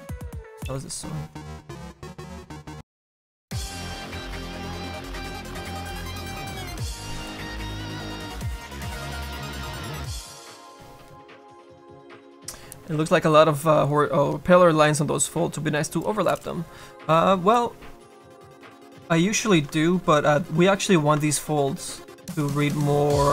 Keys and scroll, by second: 17.5 `.